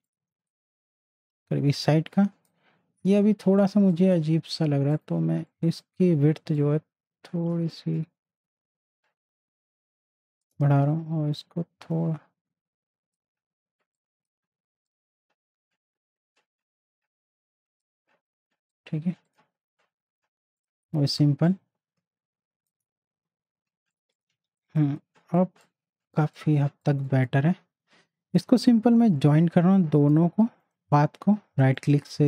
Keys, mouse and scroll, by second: 0.2 z, 0.5-3.3 drag, 3.3 ctrl+z, 3.8 space, 3.9 click, 6.8-11.4 shift+drag, 11.7 click, 15.2-18.0 drag, 21.7 alt+shift+click, 24.3 z, 24.5-26.2 drag, 26.2 space, 26.3-28.6 drag, 28.6 a, 29.3-31.8 drag, 31.8 right click.